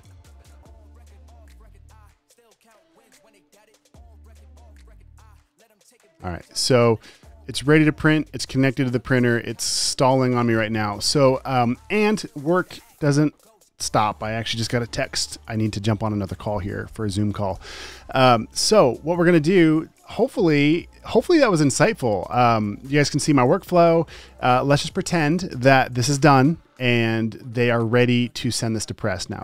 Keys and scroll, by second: 2.7-3.4 typing, 25.4 super+s.